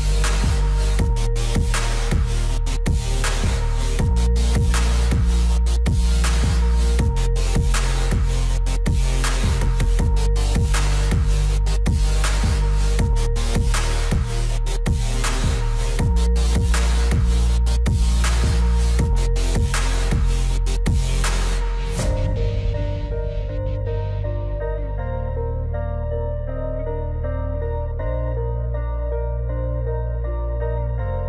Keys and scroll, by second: 3.8 F3, 31.1 ctrl+z.